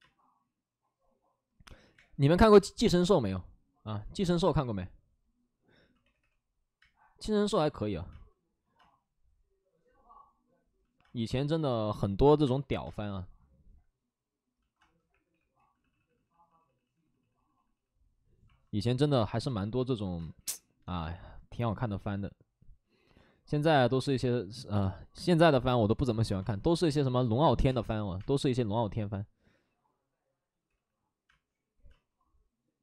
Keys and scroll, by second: 1.6 space, 1.6 ctrl+z, 1.9 ctrl+z, 3.9 ctrl+z, 4.4 space, 5.9 3, 6.7 space, 6.7 3, 11.9 space, 12.3 2, 14.8 space, 15.0 3, 15.5 ctrl+z, 15.5 3, 20.1 ctrl+z, 20.1 space, 20.3 3, 26.3 space, 27.5 3, 27.6 space, 28.0 x, 28.1 space, 30.6 ctrl+z, 31.2 space.